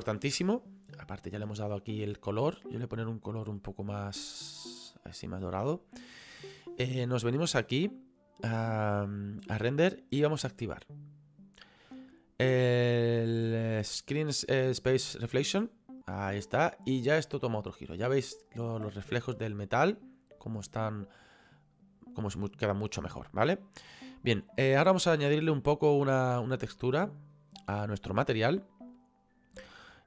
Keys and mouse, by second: 2.3 click, 3.5 click, 7.8 click, 15.6 click, 20.6 click, 22.5 click, 28.5 middle click.